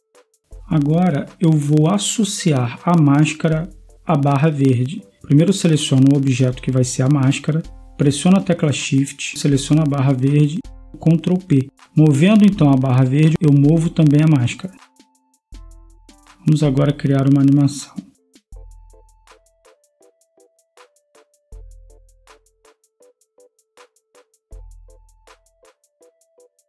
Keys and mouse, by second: 4.6-10.9 middle drag, 10.9 ctrl+p, 13.0 a, 14.5 g, 14.8 right click, 16.4 middle click, 23.3-24.2 drag, 24.5-26.6 right drag.